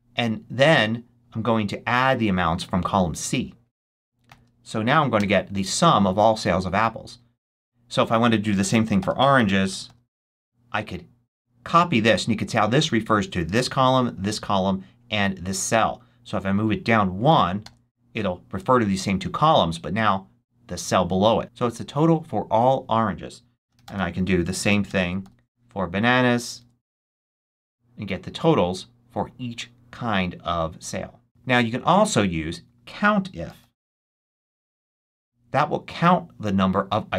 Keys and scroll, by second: 4.2 shift+0, 5.1 shift+Return, 8.7-10.3 typing, 11.7 super+c, 17.5 super+v, 23.3-25.1 typing, 26.5 super+c, 26.9 super+v, 33.1-34.7 typing.